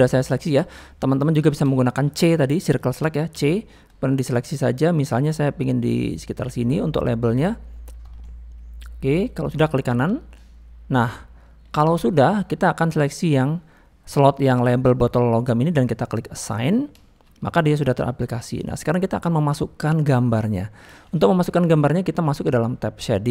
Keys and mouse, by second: 0.3 click, 0.9 middle click, 1.4 shift+middle click, 1.7 middle click, 2.4 middle click, 8.2-9.4 middle drag, 10.3 middle click, 11.5 middle click, 11.9 shift+middle click, 16.5 click, 17.0 shift+middle click, 17.4 middle click, 18.7 middle click, 21.6 middle click.